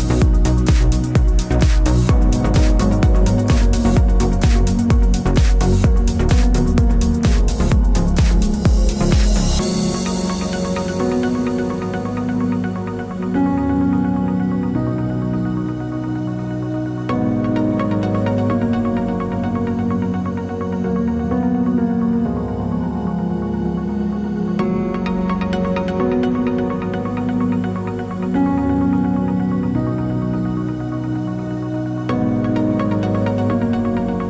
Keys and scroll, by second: 10.4 ctrl+t.